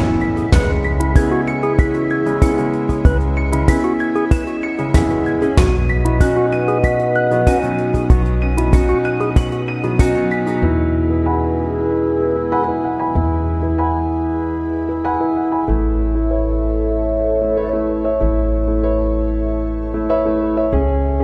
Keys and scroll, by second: 1.3 ctrl+d.